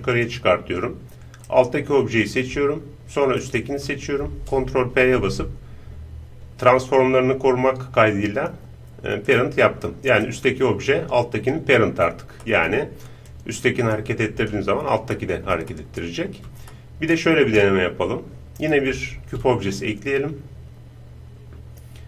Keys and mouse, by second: 0.5-3.0 middle drag, 3.0-5.1 right drag, 4.9 ctrl+p, 10.3-12.5 right drag, 12.5-13.9 middle drag, 13.3-14.9 drag, 15.1-19.1 middle drag, 19.1 shift+a.